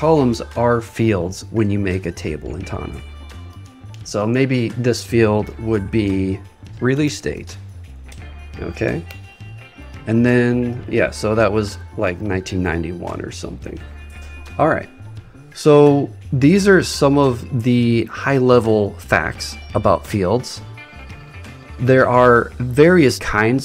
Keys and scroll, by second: 6.6 shift+r.